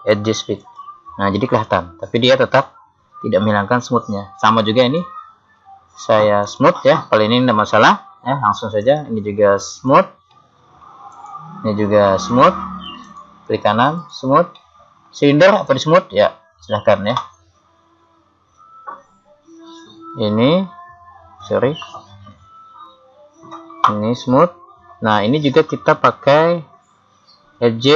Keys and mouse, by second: 4.9 right click, 6.5 click, 8.8-10.4 right drag, 9.8 click, 10.4 middle click, 11.2 right click, 12.4 right click, 13.1 right click, 14.8-20.2 middle drag, 21.9 click, 21.9 right click, 24.0 click, 27.1 click.